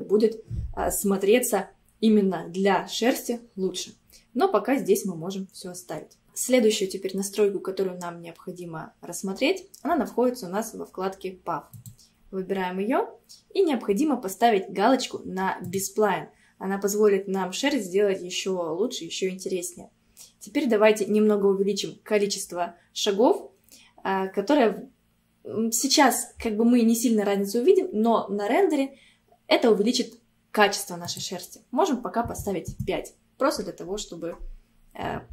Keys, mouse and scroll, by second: 5.1-5.6 scroll down 1, 5.6 scroll down 1, 9.5-11.2 scroll down 1, 11.8 click, 12.6-15.7 scroll down 2, 15.7 click, 31.1-33.5 drag, 33.5-34.0 scroll down 2.